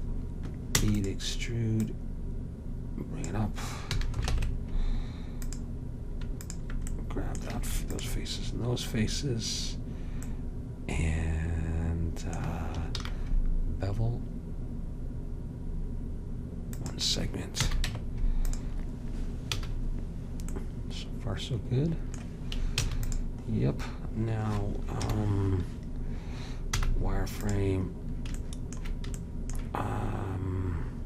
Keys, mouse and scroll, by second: 0.9 e, 1.9-3.8 drag, 4.1 a, 4.4 ctrl+Tab, 7.1-10.0 drag, 13.1 ctrl+b, 17.7 a, 17.9 Tab, 19.7 a, 22.9 ctrl+s, 25.1 KP_7, 26.8 z.